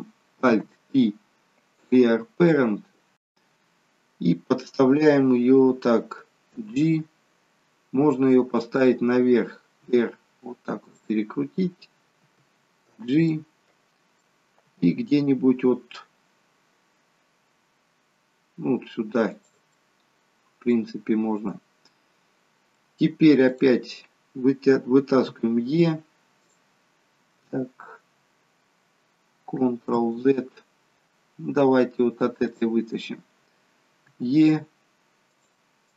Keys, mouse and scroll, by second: 0.6 alt+p, 3.6 scroll down 2, 6.3 g, 9.7 r, 12.2 g, 13.1 middle click, 14.6 g, 19.7 middle click, 21.8 middle click, 23.4 click, 25.2 e, 29.9 ctrl+z, 31.1 scroll down 1, 32.4 click, 34.0 e, 35.8 click.